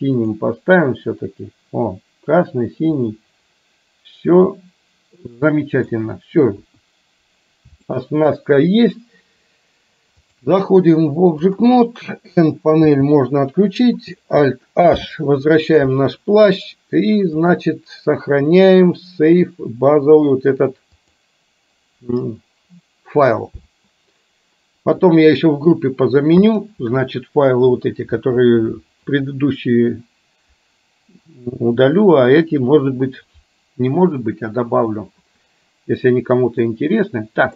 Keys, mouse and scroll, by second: 0.3 click, 3.1-6.0 middle drag, 6.6 KP_1, 7.9-8.4 middle drag, 10.4-11.8 drag, 12.9 n, 15.1 alt+h, 17.5-21.3 drag, 36.8-37.5 middle drag.